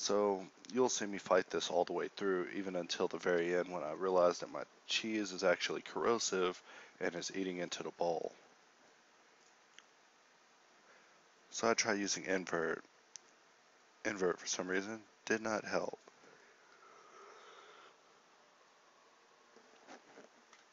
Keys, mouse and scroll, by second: 4.8 shift+a, 8.6 g.